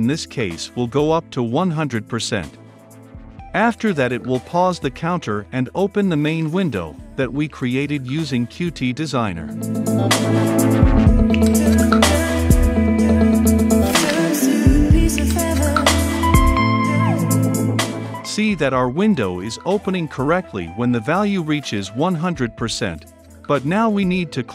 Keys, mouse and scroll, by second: 0.5 Return, 0.6 Tab, 1.1-12.3 typing, 6.7 Return, 9.9 click, 10.5 click, 10.6 Return, 12.5-13.6 drag, 13.6 Return, 14.2 Return, 14.3-15.4 typing, 15.8 ctrl+s, 16.9 ctrl+F5, 20.6-24.5 drag.